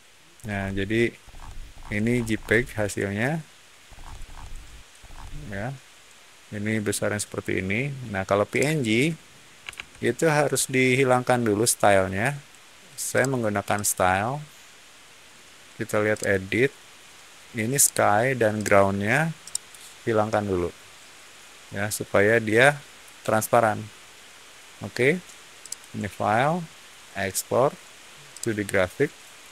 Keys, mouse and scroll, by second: 0.3 scroll down 1, 1.2 scroll down 1, 1.6-3.8 scroll up 2, 3.8 middle click, 4.9 middle click, 8.4 click, 9.7 alt+Tab, 13.0 click, 13.7 click, 16.0 click, 17.7 click, 18.5 click, 19.3-22.9 middle drag, 25.5 click, 28.2 click.